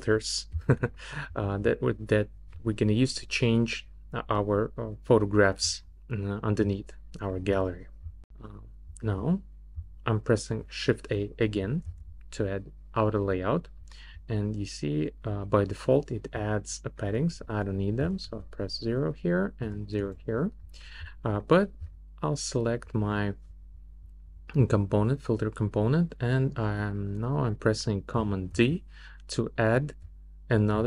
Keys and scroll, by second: 11.9 shift+a, 18.0 0, 19.6 0, 20.0 Return, 28.5 super+d.